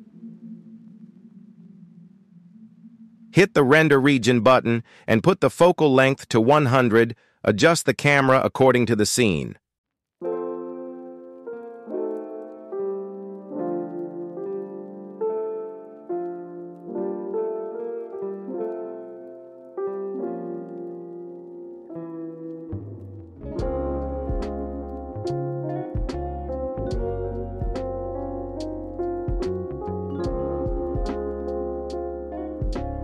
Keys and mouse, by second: 14.2 click, 14.2 KP_0, 16.4 KP_0, 18.3 t, 19.1 click, 19.8 KP_7, 21.4 click, 22.6 g, 26.4 g, 29.3-30.6 drag, 31.7 g.